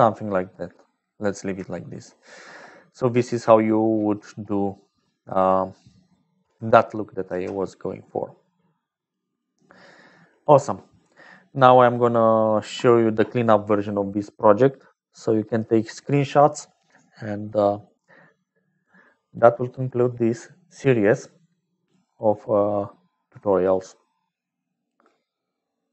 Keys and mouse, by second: 0.4 middle click, 1.5 shift+click, 2.2 click, 4.7 click, 5.8 click, 7.2 ctrl+j, 8.0-9.1 drag, 9.3 click, 18.6 click.